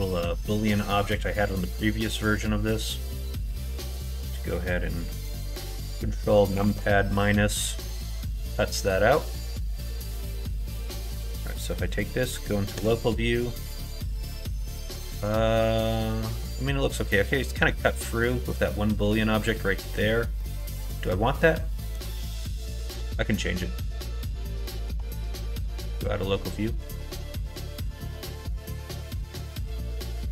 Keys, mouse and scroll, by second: 0.3 middle click, 1.3 middle click, 2.7 middle click, 3.5 shift+click, 6.5 ctrl+KP_Subtract, 7.5 click, 7.8 middle click, 8.7-10.8 middle drag, 11.0 middle click, 13.1-16.8 middle drag, 18.0 middle click, 19.0 middle click, 19.7 middle click, 20.3-21.9 middle drag, 22.5 middle click, 26.8 click, 27.1 middle click, 27.7 middle click, 28.3 middle click, 28.7 shift+middle click, 29.1 Tab, 30.0 alt+z.